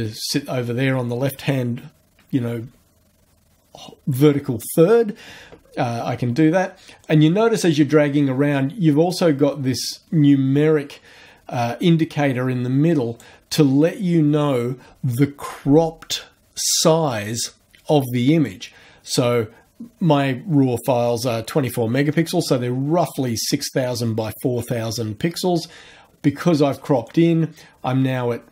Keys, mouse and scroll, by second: 7.0-13.4 drag, 27.1-28.5 drag.